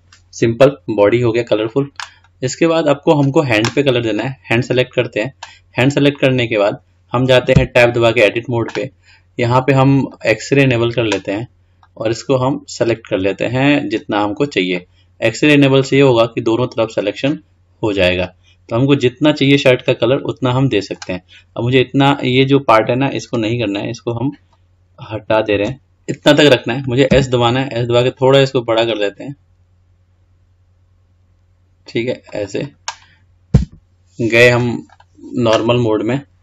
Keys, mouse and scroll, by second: 1.8 drag, 2.4-4.4 middle drag, 4.4 click, 6.5-7.8 scroll up 2, 7.8 Tab, 10.3-12.1 drag, 14.9-18.0 middle drag, 22.3-23.2 scroll up 2, 24.7 ctrl+Left, 25.8 scroll down 5, 26.2 scroll up 2, 27.3 s, 33.8 Tab, 35.1 click.